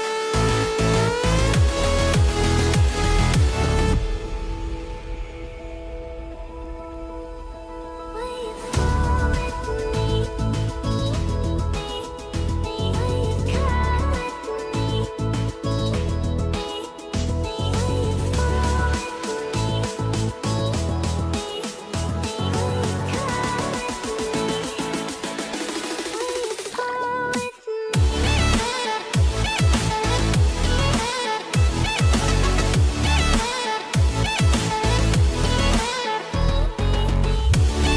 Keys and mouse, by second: 0.9 click, 1.2 r, 2.5 r, 4.4 r, 7.2 ctrl+Tab, 9.0 click, 9.6 ctrl+KP_0, 15.8 click, 16.4 ctrl+Tab, 20.0 r, 21.4 click, 21.6 r, 25.3 click, 25.3-37.9 right drag, 25.8 r, 26.7 r, 28.6 click, 30.1 r, 35.2 r, 36.6 r.